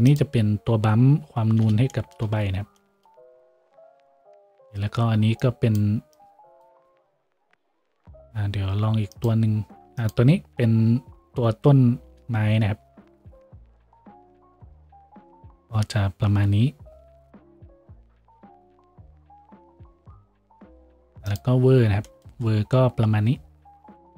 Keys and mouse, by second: 13.6 a.